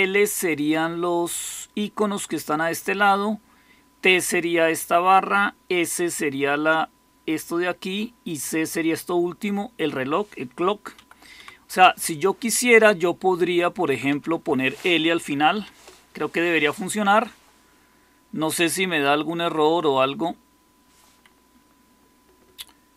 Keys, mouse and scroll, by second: 10.9 Right, 11.3 Left, 13.3 Delete, 13.8 Right, 14.0 Right, 14.2 Right, 15.5 shift+l.